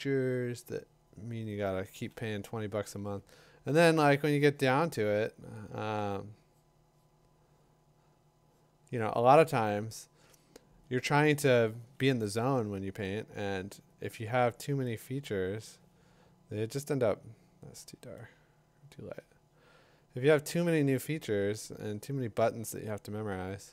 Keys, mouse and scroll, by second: 0.4 click, 1.6 click, 3.0 2, 4.6-5.6 drag, 5.6 [, 14.1 click, 15.3-21.3 drag.